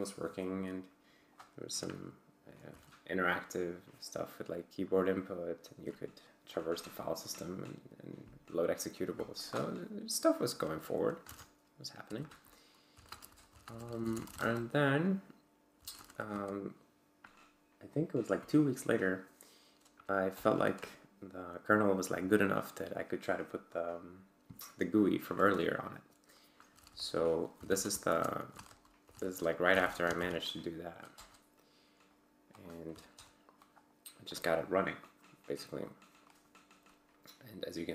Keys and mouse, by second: 2.4-3.2 typing, 9.4 click, 11.2 ctrl+c, 12.0-16.6 typing, 12.3 Return, 20.3 Return, 26.9-29.7 typing, 26.9 Return, 29.8 Tab, 30.1 ctrl+l, 31.1 Return, 32.5 click, 32.9 c, 33.1 Return, 34.3-36.1 drag.